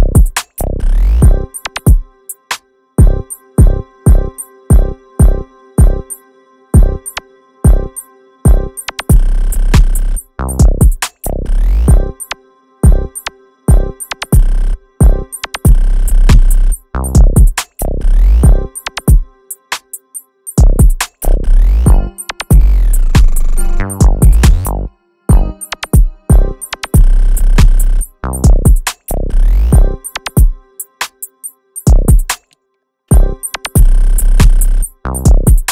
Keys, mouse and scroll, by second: 2.5-8.0 typing, 12.3 space, 12.8 space, 13.2 space, 13.6 space, 14.8 space, 14.9 space, 26.0 space, 26.2 space, 27.2 double click, 32.4 space, 33.0 space.